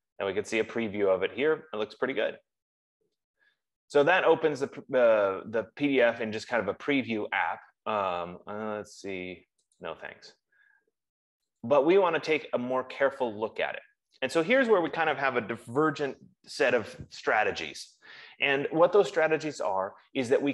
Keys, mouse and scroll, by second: 8.9 F15, 10.3 click, 12.4 click.